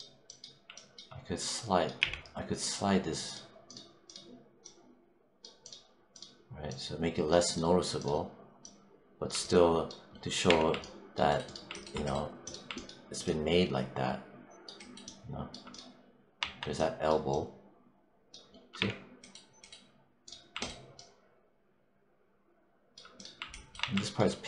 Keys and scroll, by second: 1.9 z, 10.3 3, 16.2 1, 18.6 3, 23.7 1.